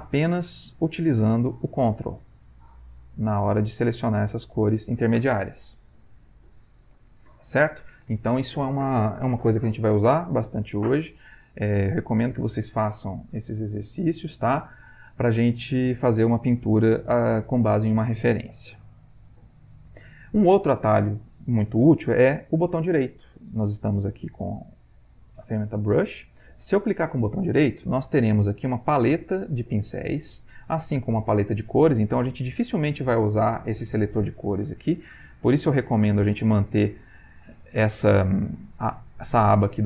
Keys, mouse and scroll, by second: 19.6-26.2 middle drag, 26.2-28.3 scroll up 1, 35.4 click.